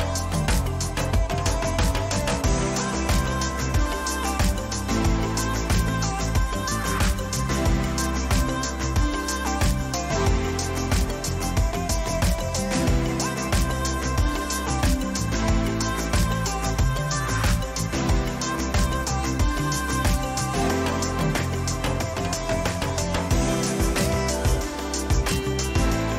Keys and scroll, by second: 1.7 ctrl+t, 6.9 Return, 8.0 Down, 11.5 ctrl+-, 23.4 ctrl+t.